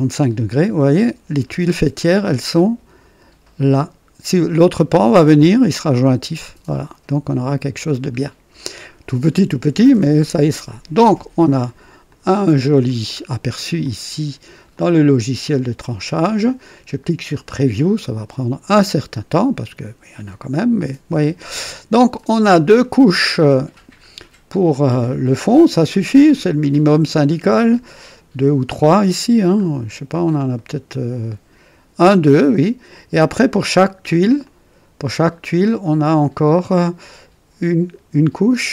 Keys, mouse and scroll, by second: 6.6-8.0 drag, 8.1-8.5 scroll down 2, 10.5 click, 11.4 scroll up 2, 12.0-12.9 drag, 13.1 scroll down 2, 13.8-14.5 drag, 14.7-16.4 drag, 17.2 click, 22.1-23.8 drag, 23.9-24.7 scroll up 4, 26.2 click, 27.3 scroll up 1, 28.0-29.0 right drag, 29.5 scroll up 2, 30.5-31.5 right drag, 33.7 click, 34.4 click, 35.6-36.6 right drag.